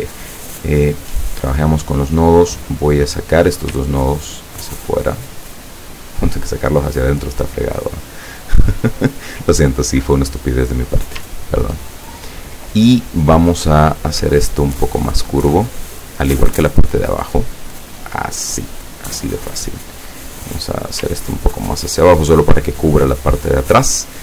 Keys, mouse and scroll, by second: 0.9 click, 2.4 click, 3.9-7.9 ctrl+drag, 10.2 click, 11.5 ctrl+click, 13.7-15.9 drag, 16.7-18.8 drag, 19.4 click, 20.7-22.4 drag.